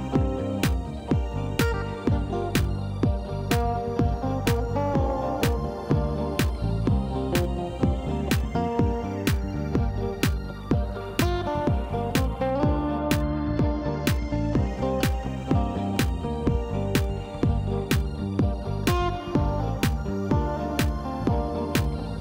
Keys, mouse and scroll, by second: 0.3 shift+click, 1.2 f, 1.7 click, 2.6 shift+click, 2.8 shift+click, 4.0 f, 4.5 shift+click, 5.2 shift+click, 5.5 shift+click, 6.0 f, 6.4 click, 6.8 shift+click, 7.3 shift+click, 7.6 shift+click, 8.2 f, 8.6 click, 9.0 shift+click, 9.6 shift+click, 10.4 f, 10.5 middle click, 11.2 click, 11.8 shift+click, 12.2 shift+click, 12.8 shift+click, 13.6 f, 14.0 click, 14.6 shift+click, 15.5 shift+click, 16.3 f, 16.8 click, 17.7 shift+click, 18.1 shift+click, 18.5 f, 19.0-20.5 middle drag, 21.5 click.